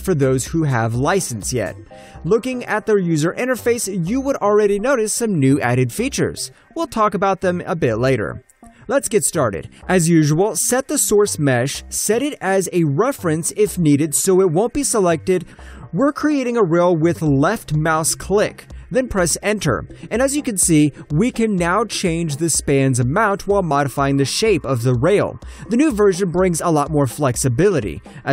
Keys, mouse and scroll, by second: 0.0 scroll down 1, 2.3 double click, 11.8 click, 16.8 alt+scroll up 1, 16.9 alt+middle click, 17.1 alt+right click, 17.7 click, 17.9 alt+middle click, 18.0 alt+scroll up 1, 18.2 alt+middle click, 19.0 click, 20.2 Return, 20.7 alt+middle click, 20.9-21.6 alt+scroll up 1, 21.6 shift+middle click, 22.8 ctrl+click, 23.9 alt+middle click, 24.4 ctrl+click, 24.4 alt+middle click, 25.2 shift+middle click, 26.7 ctrl+click, 27.3 alt+middle click, 28.1 shift+middle click.